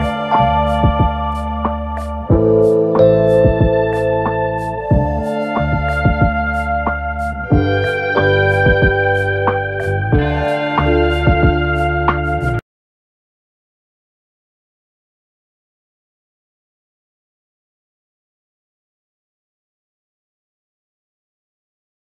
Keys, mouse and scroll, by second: 5.6 ctrl+-, 6.9 ctrl+0, 8.3 ctrl+=, 10.9 ctrl+0.